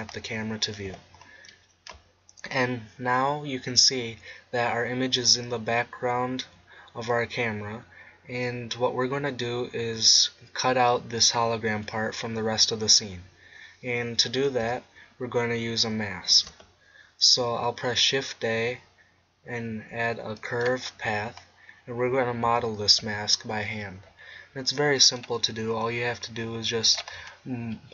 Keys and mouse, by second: 0.9 n, 16.3 shift+a, 21.3-22.4 middle drag, 22.4 Tab, 24.8 middle click, 25.7 g, 27.2-27.9 drag.